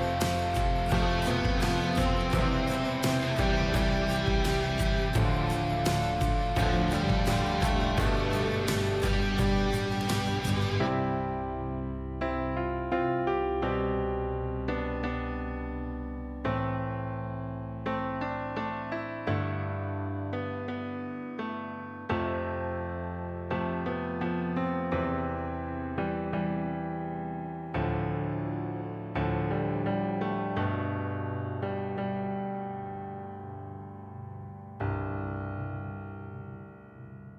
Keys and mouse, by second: 0.7 s, 2.6 click, 5.9 click, 6.2 click, 6.6 click, 7.0-8.4 drag, 10.3 click, 11.4-13.0 drag, 14.3 click, 14.8 click, 16.4 click, 16.9 click, 18.0 click, 18.7 click, 19.4 click, 23.1-24.1 right drag, 25.5 click, 28.0 click, 29.2 click, 30.5 click, 31.1 0, 32.6 click, 36.6 click.